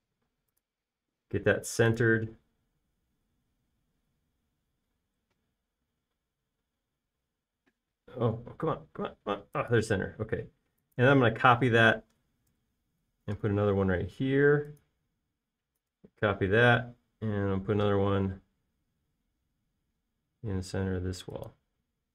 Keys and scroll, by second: 1.7 space, 2.0 m.